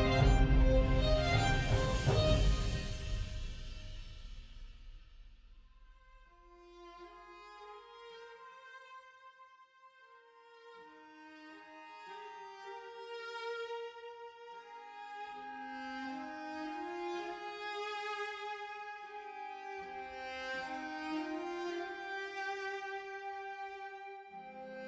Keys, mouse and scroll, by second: 11.7 ctrl+z.